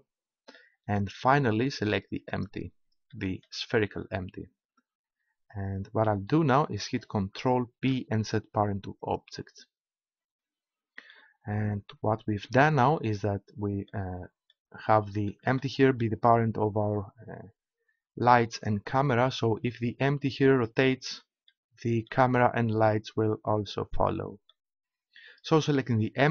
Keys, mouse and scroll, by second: 7.7 ctrl+p, 11.1-15.4 middle drag, 17.2-18.6 middle drag, 21.6-22.6 middle drag, 23.9 middle click, 24.7-26.3 middle drag.